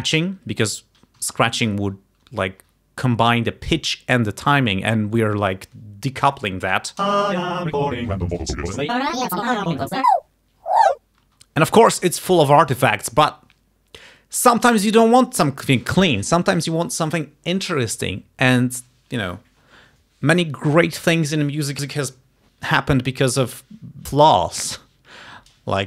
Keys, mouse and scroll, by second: 1.3 Home, 7.1 space, 11.3 space.